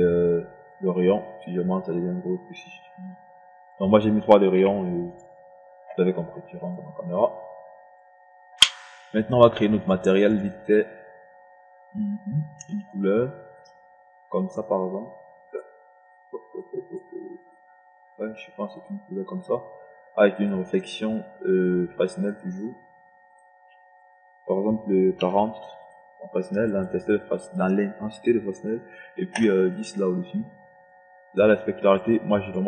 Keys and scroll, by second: 5.2 3, 25.7 KP_4, 26.0 KP_0, 30.1 KP_0.